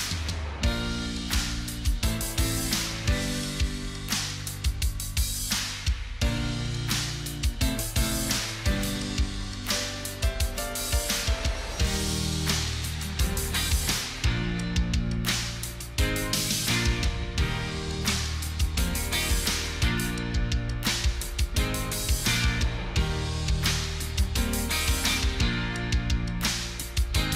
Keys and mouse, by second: 10.6 double click, 13.8 double click, 19.8 double click.